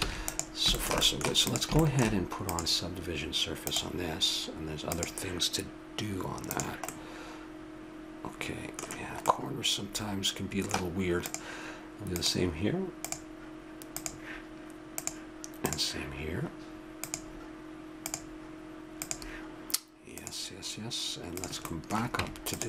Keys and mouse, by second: 0.0 ctrl+s, 1.5-8.5 drag, 6.9-7.9 middle drag, 8.5 middle click, 9.3-10.5 middle drag, 11.2-15.2 drag, 22.1 Tab.